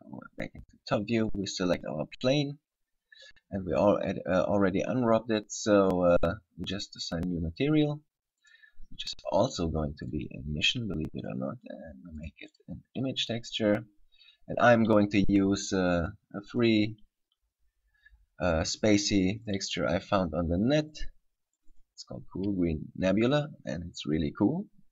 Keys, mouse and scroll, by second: 1.6 right click, 6.8 click, 8.7 click, 11.3 click, 16.7 click, 22.0 click.